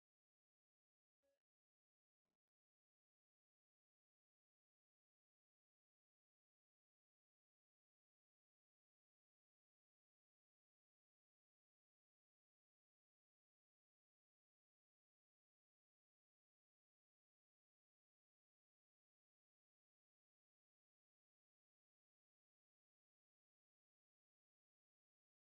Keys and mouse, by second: 4.5-13.8 drag.